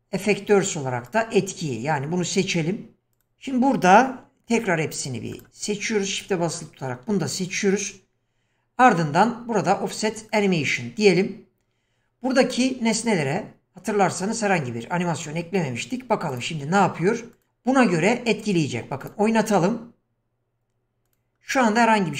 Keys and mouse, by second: 3.1 click, 4.5 q, 10.3 click, 17.3 click, 19.0 click, 21.1 click, 21.6-22.1 middle drag.